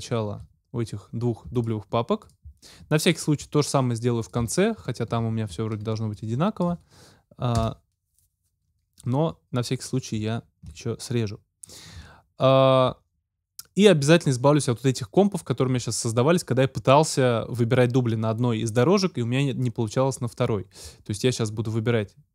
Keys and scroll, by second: 7.6 super+BackSpace.